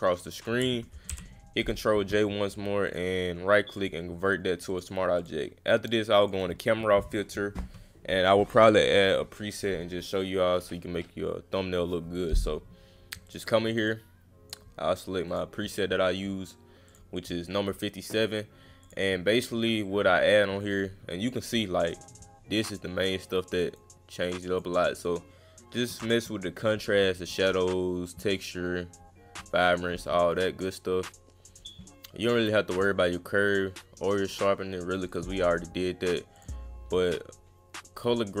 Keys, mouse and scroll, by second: 2.9 click, 3.7 click, 4.7 click, 5.2 click, 6.2 click, 6.9 space, 13.3 click, 13.9 click, 15.3 click, 16.9 click, 18.8 click, 21.9 click, 23.0 click, 24.2 click, 31.5 click, 35.1 click, 36.4 click.